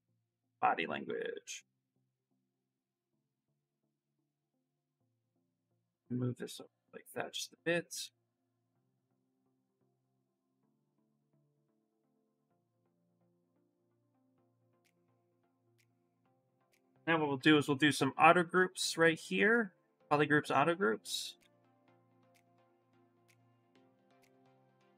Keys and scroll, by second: 9.4 s, 10.8 ctrl+z, 11.5 ctrl+z, 11.8 ctrl+z, 12.1 ctrl+z, 14.2 ctrl+shift+z, 16.8 shift+f, 17.2 2, 21.8 w, 22.6 q, 23.7 w.